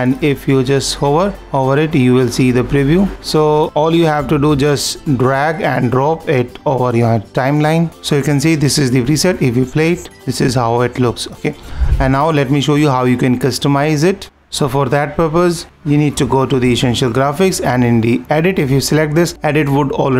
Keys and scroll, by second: 7.9 super+-.